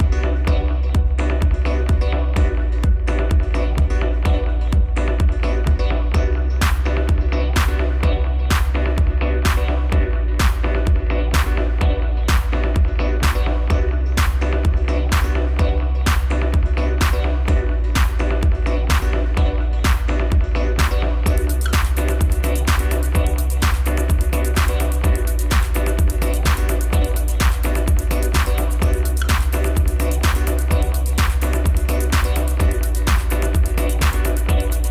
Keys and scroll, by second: 0.1 ctrl+c, 2.0-2.8 typing, 6.2-8.4 typing, 8.8 Return, 10.5 x, 11.5 ctrl+v, 15.9 shift+a.